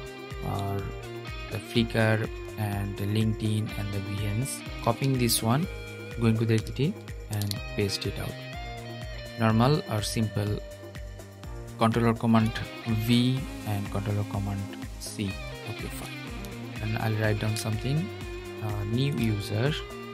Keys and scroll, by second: 4.6 super+c, 7.0 super+v.